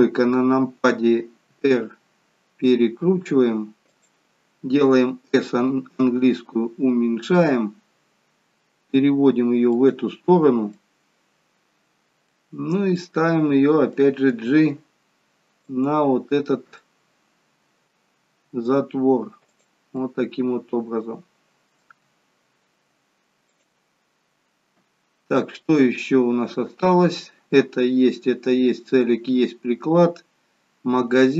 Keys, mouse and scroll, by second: 1.6 r, 10.7 middle click, 12.9 middle click, 14.2 g, 16.1 scroll up 3, 16.8 middle click, 18.3 g, 21.9 g, 24.4-25.5 scroll down 4.